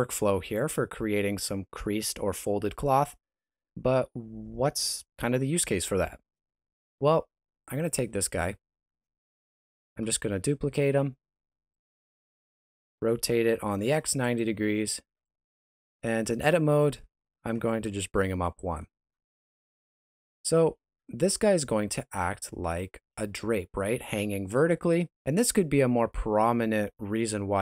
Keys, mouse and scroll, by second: 7.7 right click, 8.4 shift+middle click, 9.6 shift+d, 12.7 r, 15.1 shift+middle click, 15.7 Tab, 16.2 a, 17.5 g, 19.1 scroll down 1, 19.6 shift+middle click, 20.6 alt+a, 21.0 Tab.